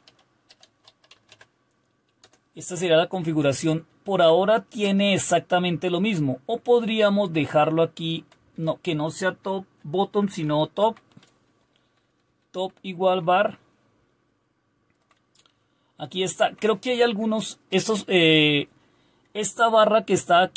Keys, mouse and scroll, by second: 0.0-4.4 typing, 5.5-8.6 typing, 10.2-11.3 typing, 11.6 Delete, 11.8 Delete, 12.1 Delete, 12.3 Delete, 12.5 Delete, 13.6-15.0 Down, 16.1 Down, 16.6-17.3 typing, 17.5 Up, 17.6 Up.